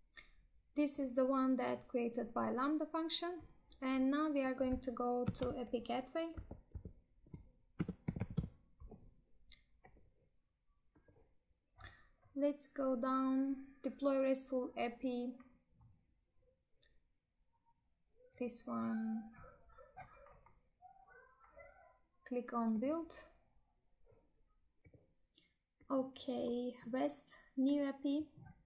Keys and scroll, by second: 7.6 space.